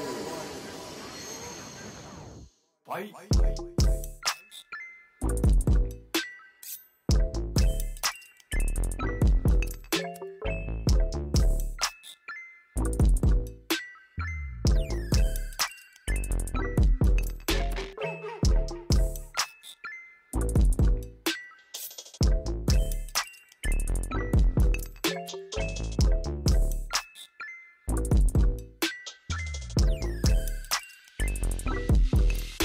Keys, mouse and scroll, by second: 2.1 scroll down 2, 3.7 click, 4.8 g, 6.0 Right, 6.2 KP_0, 7.5 g, 8.7 r, 11.3 click, 11.8 scroll down 1, 12.0 r, 13.8 g, 15.1 KP_0, 17.0-20.0 drag, 20.4-21.5 drag, 21.5 0, 23.4 g, 24.4 g, 26.2 r, 28.6-29.5 scroll up 1, 29.5 ctrl+c, 29.8 ctrl+v, 29.9 g.